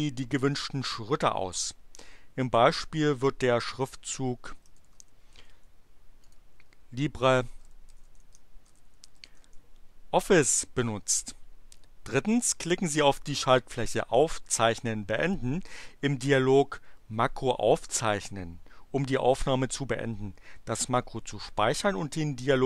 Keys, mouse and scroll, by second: 4.5-6.0 typing, 6.2 click, 7.2-9.8 typing.